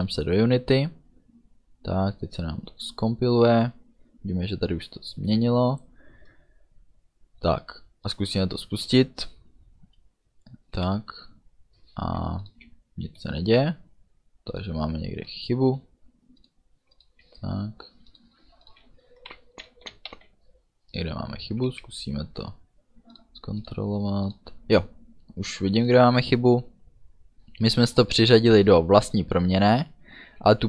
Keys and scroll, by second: 10.8 d, 12.7 a, 18.9-20.2 typing.